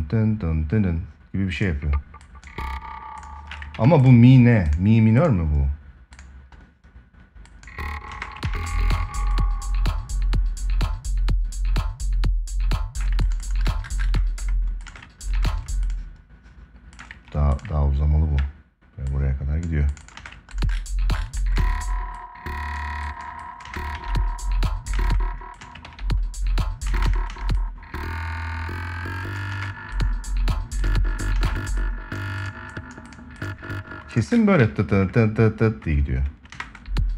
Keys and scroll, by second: 3.5 ctrl+s, 7.8 space, 8.2 ctrl+s, 14.0 space, 19.9 space, 21.3 space, 23.3 space, 23.7 ctrl+s, 25.6 ctrl+s, 26.6 space, 29.2 space, 31.1 space, 34.3 ctrl+s, 36.3 space.